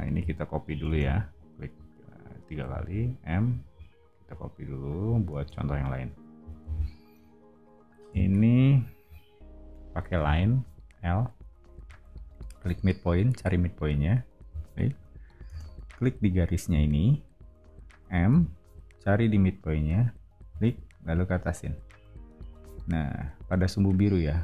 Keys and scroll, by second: 0.8 space, 2.6 m, 5.3 space, 6.5 o, 11.0 l, 15.4 space, 18.3 m.